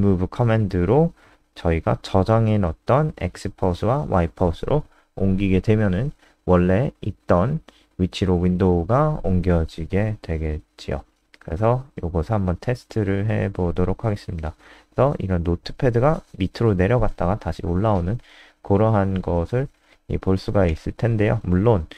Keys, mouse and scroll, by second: 0.8-6.6 typing, 6.9 ctrl+Down, 8.1 click, 8.8 ctrl+s, 9.8 super+n, 10.6 alt+click, 11.2 ctrl+alt+space, 11.6 alt+click, 19.4 alt+F4, 19.6 click, 19.9 ctrl+s, 20.4 click.